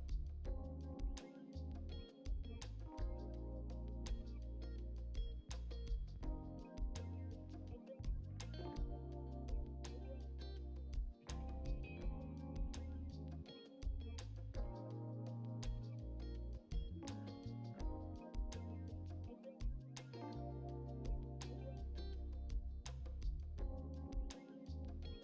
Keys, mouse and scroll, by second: 0.0 click, 0.4-1.5 drag, 1.5 middle click, 2.5 ctrl+z, 3.1 alt+shift+click, 4.4 click, 5.1 scroll down 3, 5.2 middle click, 5.8 click, 6.0 scroll up 2, 6.2-6.7 scroll down 5, 6.7 shift+middle click, 7.4 scroll up 3, 7.5 shift+middle click, 8.6 ctrl+r, 9.1 middle click, 9.2 scroll up 3, 9.5 click, 10.0 alt+click, 10.6 shift+d, 11.9 Tab, 12.0 click, 12.2 click, 12.2 Tab, 12.5 a, 13.6 scroll down 2, 13.7 shift+middle click, 14.2 e, 14.9 Tab, 15.1 Delete, 15.2 middle click, 15.5 click, 16.1 Tab, 16.2 middle click, 16.3-16.8 scroll up 2, 16.4 shift+middle click, 16.9 click, 17.4 KP_7, 17.8-18.9 drag, 19.2 click, 21.4 shift+d, 21.9 p, 22.5 click, 23.0 click, 23.2 Tab, 23.9 scroll down 3, 24.0 shift+middle click, 24.5 a.